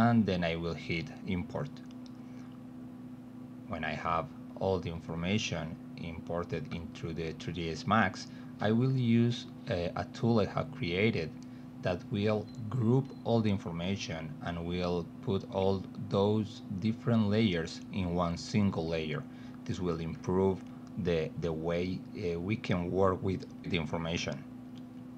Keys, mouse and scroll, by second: 2.7 click, 7.3 middle click, 8.9 alt+w, 10.0 alt+middle click, 11.1 t, 12.2 z, 12.7 middle click, 13.2 middle click, 14.5 g, 15.5 middle click, 17.0-18.1 drag, 21.1 click, 22.5 click, 24.2-25.1 typing.